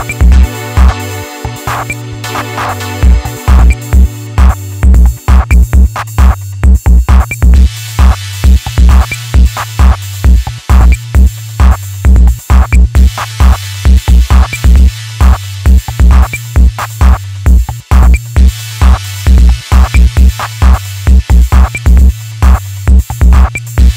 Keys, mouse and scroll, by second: 0.9 click, 2.1 ctrl+shift+click, 3.1-5.0 middle drag, 5.0 e, 6.5 click, 9.0 KP_1, 9.5-10.4 scroll up 1, 10.4 click, 10.8 ctrl+z, 11.2 middle click, 11.7 KP_1, 12.0-12.4 scroll up 3, 12.4 alt+z, 12.7 middle click, 13.4 alt+z, 14.2 click, 15.8 click, 18.3 click, 19.5 click, 21.3 KP_1, 21.9-22.4 scroll down 2, 22.4-23.4 scroll up 4, 23.4 click.